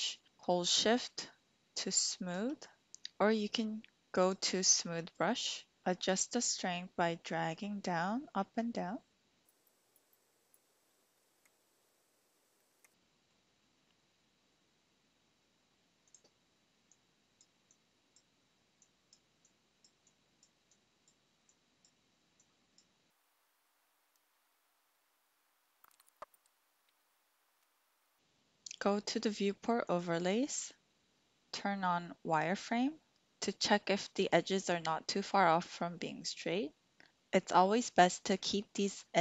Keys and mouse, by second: 1.7 shift+click, 4.2-5.4 drag, 6.1-9.4 drag, 9.4 ctrl+z, 9.6 click, 10.1 click, 10.6 click, 11.0 click, 11.3 shift+click, 11.5 click, 12.4 click, 12.7 shift+middle click, 12.9 middle click, 16.1 click, 16.8 click, 17.7 click, 18.8 click, 19.4 click, 20.0 click, 20.7 click, 21.5 click, 22.4 click, 23.1 ctrl+z, 23.1 click, 23.3 click, 23.4 click, 23.9 click, 24.4 click, 24.6 click, 24.7 middle click, 25.1 click, 25.3 click, 25.6 middle click, 26.1 middle click, 26.9 middle click, 27.1 click, 29.9-33.1 drag, 36.0 middle click.